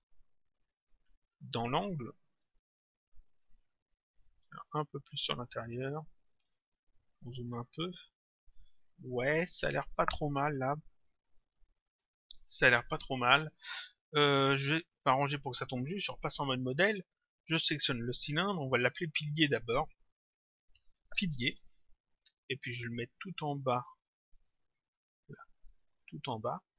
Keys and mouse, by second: 0.8 click, 3.4 click, 5.1 click, 10.0 click, 12.5 click, 16.1 click, 17.5 click, 19.2 click, 20.4-21.9 typing, 24.4 click, 25.7 click.